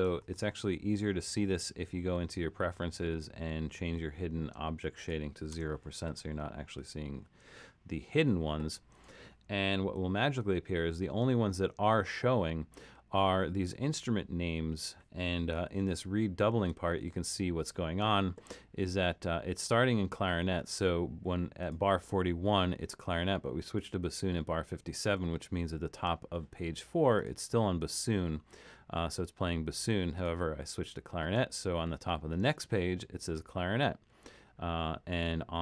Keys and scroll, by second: 0.2 super+,, 5.5 0, 15.7 super+-.